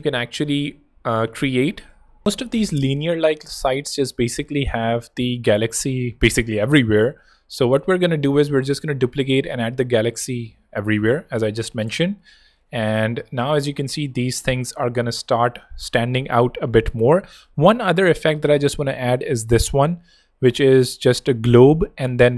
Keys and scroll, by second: 0.4 z, 1.4 space, 7.0 super+c, 8.5 super+v, 10.8 alt+super+[, 12.4 super+v, 13.0 alt+super+[, 17.3 super+Tab.